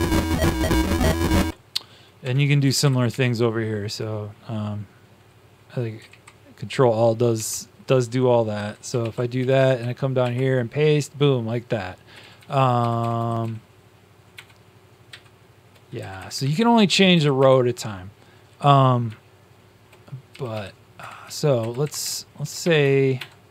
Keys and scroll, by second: 2.1 Tab, 2.6 Left, 2.7 Left, 6.0 Up, 6.0 ctrl+a, 7.3 ctrl+a, 8.9 ctrl+c, 9.3 Down, 9.6 Down, 10.1 ctrl+v, 12.1 shift+Down, 12.3 shift+Down, 12.7 shift+Down, 12.9 shift+Right, 13.1 shift+Right, 13.5 shift+Right, 14.3 shift+KP_Add, 15.0 shift+KP_Add, 15.0 shift+KP_Subtract, 15.9 Left, 16.2 Left, 16.2 Left, 16.4 Left, 17.1 Right, 20.2 Down, 20.5 Down, 20.9 Left, 21.2 Down, 21.5 Left, 21.8 Left, 22.0 Left, 22.6-23.5 typing.